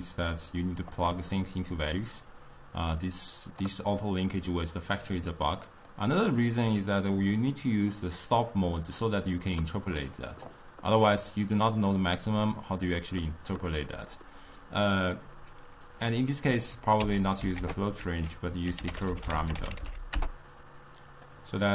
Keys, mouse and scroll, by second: 0.0-6.8 drag, 6.8-9.3 middle drag, 9.3 click, 15.0-16.4 drag, 16.7 click, 17.1 x, 17.6 ctrl+a.